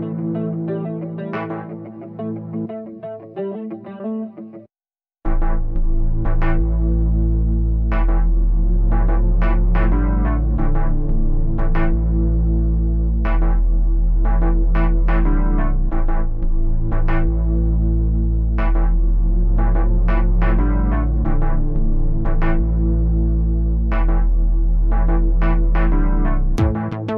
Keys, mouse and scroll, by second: 1.6-3.9 drag, 3.9 middle click, 4.4 click, 5.1 middle click, 5.8-10.9 drag, 6.0 Left, 6.4 Left, 6.6 Left, 7.1 Left, 7.3 Left, 10.9 middle click, 11.4-11.7 scroll down 1, 11.7-12.1 scroll up 2, 12.1-13.3 drag, 13.3 middle click, 13.7-14.9 drag, 14.9 middle click, 15.6-18.9 drag, 18.9-20.1 middle drag, 20.1 click, 20.4 middle click, 21.1 click, 22.0 middle click, 22.4 scroll down 1, 22.7-25.6 drag, 25.6 middle click, 26.4-27.1 drag.